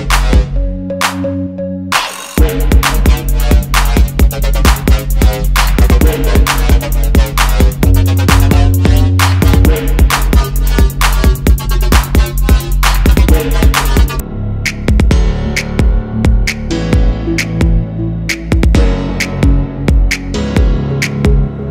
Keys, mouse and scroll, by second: 1.5 ctrl+x, 1.6 ctrl+f, 2.6 double click, 2.9 alt+scroll down 1, 5.2 double click, 8.5 alt+scroll up 1, 8.9 alt+scroll down 1, 9.1 alt+scroll up 1, 11.2 double click, 11.4 alt+scroll down 1, 12.2 i, 13.8 alt+click, 14.4 alt+scroll up 1, 16.2 alt+scroll down 1, 16.7 right click, 17.6 double click, 17.9 alt+scroll up 1, 18.6 shift+click, 20.9 double click.